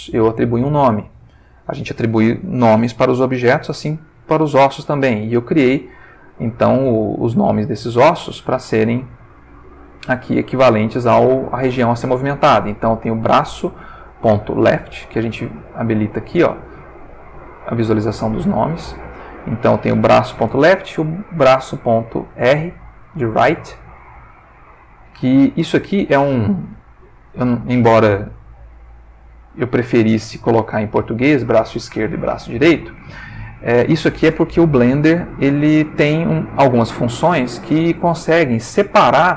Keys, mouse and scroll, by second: 0.0 shift+click, 6.0 click, 6.6 click, 7.8 alt+r, 10.0 g, 11.1 Escape, 12.0 ctrl+middle click, 13.4 ctrl+middle click, 15.6 click, 16.1 click, 17.3 click, 18.0 click, 21.2 click, 22.0-24.1 ctrl+middle drag, 25.8 click, 26.4 r, 27.1 click, 27.7 click, 28.1 r, 29.9 click, 31.0 click, 32.0 r, 33.5 click, 37.3-39.0 ctrl+middle drag.